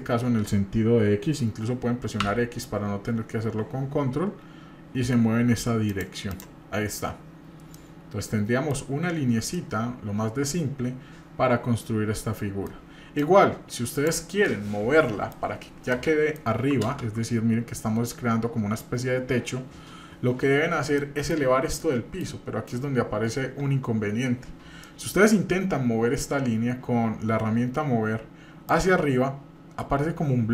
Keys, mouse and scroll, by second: 16.9 ctrl+space, 16.9 middle click, 20.9 middle click, 21.4-21.8 scroll up 2, 21.8 middle click, 24.8 middle click, 25.1-25.5 scroll up 2, 26.4 scroll up 1, 28.7-30.5 drag.